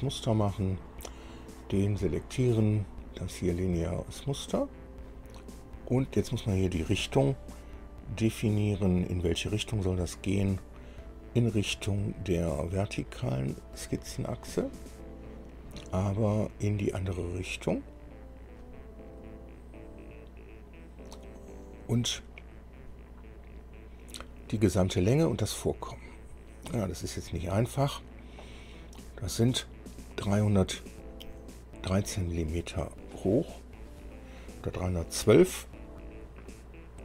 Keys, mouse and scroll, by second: 0.1 scroll down 2, 1.0 click, 4.2 click, 9.0 click, 10.8 click, 14.0 click, 19.3 click.